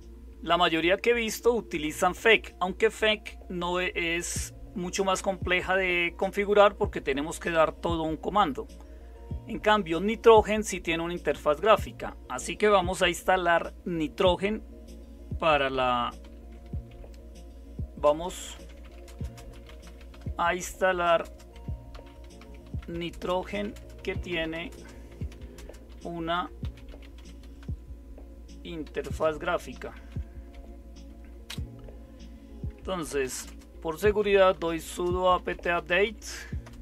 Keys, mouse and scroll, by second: 16.2 typing, 18.0-31.4 typing, 32.7-36.6 typing.